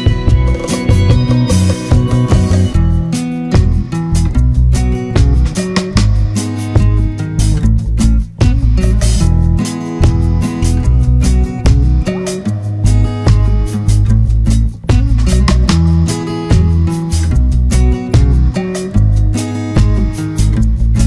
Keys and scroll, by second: 0.4 Return, 3.8 ctrl+=, 4.2 ctrl+space, 8.2 Return, 9.3 ctrl+=, 9.4 ctrl+space.